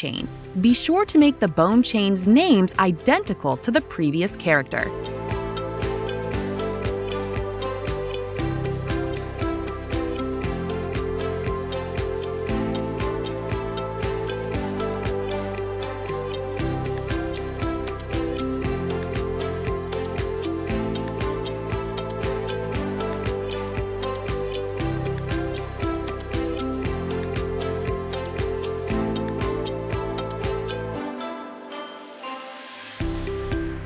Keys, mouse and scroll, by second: 1.1 click, 5.4 click, 10.7 click, 10.7 typing, 13.5 click, 14.4 click, 15.7 click, 15.8 click, 18.0 click, 19.7 ctrl+click, 20.6 ctrl+click, 21.1 click, 22.7 click, 24.2 click, 27.5 click, 29.2 l, 31.8 typing, 33.6 Return, 33.6 click.